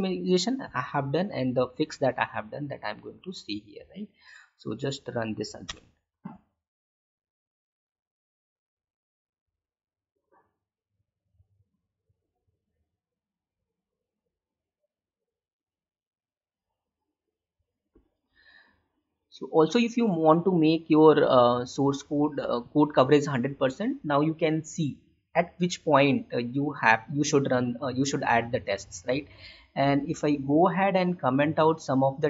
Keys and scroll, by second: 4.4 Up.